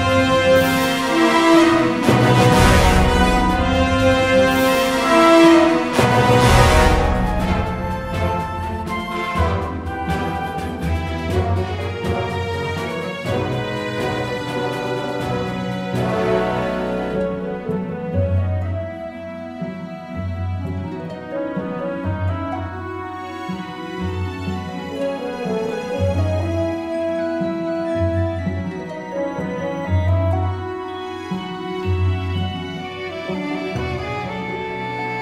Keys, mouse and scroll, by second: 1.9 click, 9.1 x, 11.5 ctrl+Tab, 14.6 ctrl+Tab, 19.2 f, 20.4 z, 21.3 a, 22.7 l, 24.0 KP_3, 24.4 KP_1, 28.4 middle click, 32.0 l.